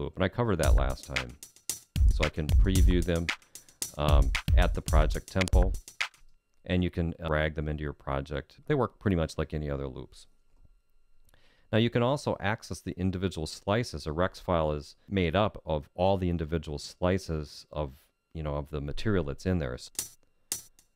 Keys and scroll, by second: 19.8 Down.